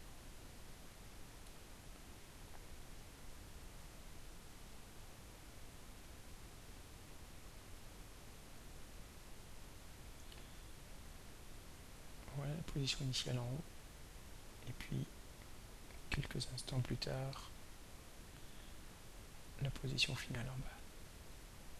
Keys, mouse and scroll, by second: 3.3-3.9 drag, 4.6-6.3 drag, 8.6-9.4 drag, 9.7-12.0 drag, 15.3-16.3 drag, 17.1 click, 19.5-21.4 drag.